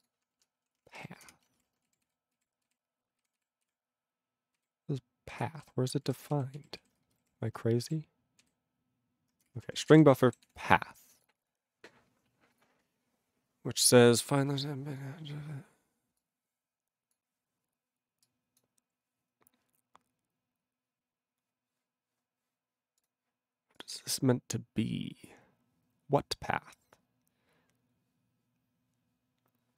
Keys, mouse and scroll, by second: 0.0 click, 0.0 click, 0.4 ctrl+r, 0.5-1.5 typing, 1.7 alt+<, 2.0 ctrl+s, 2.3 ctrl+s, 2.6 ctrl+s, 3.2 ctrl+s, 3.4 ctrl+s, 4.2 ctrl+s, 4.6 ctrl+s, 5.3 ctrl+s, 5.7 ctrl+s, 6.0 ctrl+s, 6.4 ctrl+s, 6.5 ctrl+s, 7.0 space, 7.2 =, 8.3 ctrl+s, 8.4 ctrl+s, 9.5 Return, 9.8 ctrl+a, 9.8 ctrl+space, 9.8 ctrl+e, 9.9 ctrl+g, 10.4 ctrl+s, 11.0 click, 11.2 double click, 12.5 click, 12.6 click, 14.2 click, 15.0 click, 16.2 click, 17.1 click, 18.3 click, 18.6 click, 23.0 click, 23.0 click, 23.8 click, 23.8 click, 24.6 click, 24.6-25.4 scroll down 2, 25.4-28.1 scroll down 3.